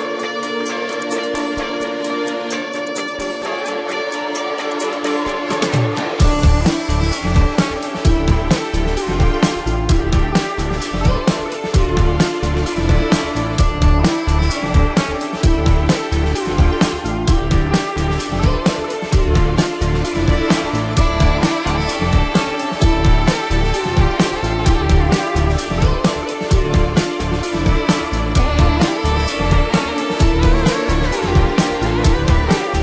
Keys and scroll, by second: 6.4 ctrl+-, 8.3 space, 8.7 ], 8.9 ctrl+alt+z, 9.0 ], 15.9 space, 16.4 ctrl+alt+z, 18.4 ctrl+alt+z, 19.8 ctrl+=, 22.6 ctrl+=.